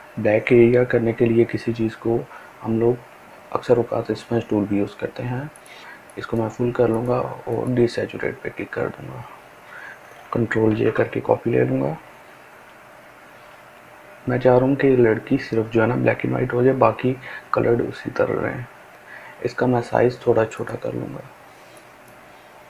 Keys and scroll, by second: 12.1 ctrl+j, 14.0 [, 14.3 [, 14.7 [, 14.9 [, 20.4 [, 20.7 [.